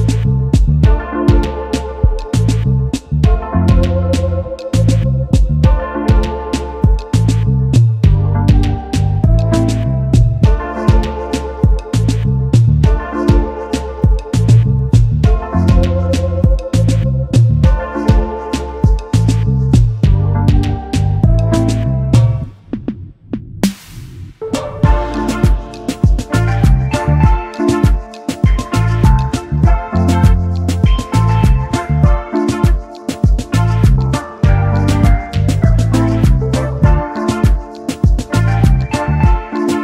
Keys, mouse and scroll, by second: 2.9 ctrl+x, 3.1 ctrl+f, 4.0 double click, 5.5 space, 6.5 double click, 8.4-8.7 alt+scroll up 1, 8.7 alt+scroll down 1, 9.6 right click, 10.6 double click, 10.9 alt+scroll up 1, 13.1 double click, 13.8 alt+shift+click, 15.0 double click, 21.6 ctrl+8, 22.8 ctrl+8, 22.8 alt+scroll down 1, 23.1 space, 26.6 alt+scroll up 1.